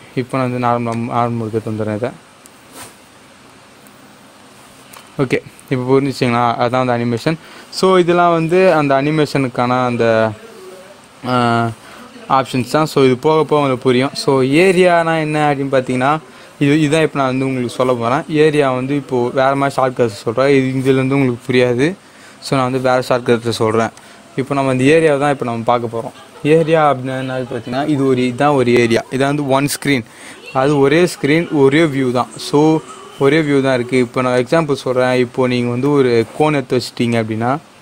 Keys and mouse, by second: 5.2-7.2 drag, 23.9 click, 34.3-37.1 drag.